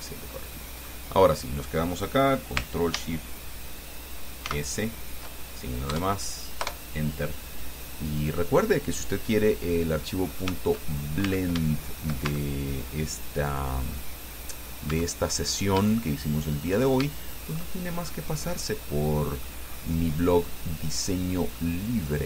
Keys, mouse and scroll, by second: 1.4-1.7 scroll up 1, 2.1 scroll down 1, 4.7 ctrl+shift+s, 6.1 KP_Add, 6.8 KP_Enter, 8.5-8.9 scroll down 2, 9.2 click, 10.2 click, 11.0-11.4 shift+scroll up 2, 11.5 Tab, 12.0 shift+click, 12.5 Tab, 12.9 shift+right click, 13.8-15.0 drag, 15.1 Tab, 15.5-16.0 scroll up 2, 16.1 shift+click, 17.3 shift+click, 18.3-19.8 shift+drag, 19.9-20.3 scroll up 2, 20.5 scroll down 2, 20.9-22.1 middle drag, 22.1 right click.